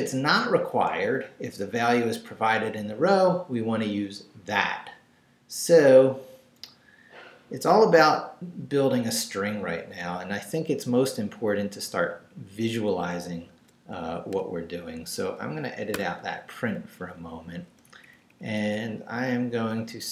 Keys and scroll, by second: 11.9 Right, 14.2 i, 15.9 shift+3, 16.8 shift+Left, 17.9 Up, 19.8-20.1 typing.